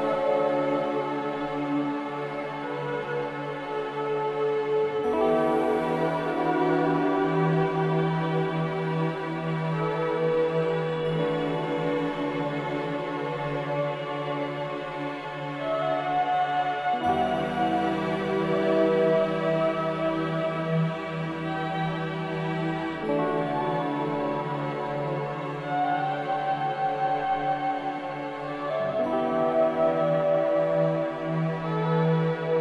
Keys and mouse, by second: 2.1-3.8 middle drag, 4.7 ctrl+b, 11.0-11.5 middle drag, 11.5 click, 11.5 right click, 13.7 ctrl+b.